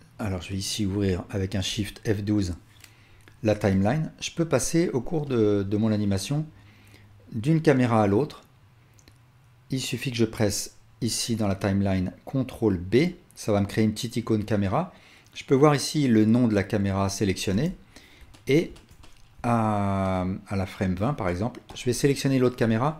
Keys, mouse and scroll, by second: 1.8 shift+F12, 1.8-12.6 shift+drag, 12.7 ctrl+b, 15.8-17.8 drag, 17.5 KP_0, 18.7-19.4 alt+shift+drag, 20.6-22.9 drag.